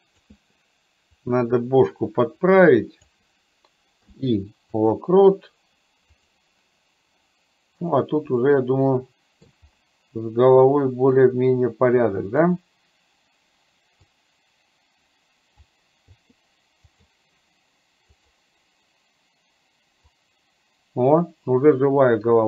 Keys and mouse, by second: 1.4-3.1 drag, 6.3 click, 7.9 click, 8.5-9.5 middle drag, 11.1 click, 11.6 click, 14.0-15.8 drag, 18.3 click, 20.1-22.4 drag.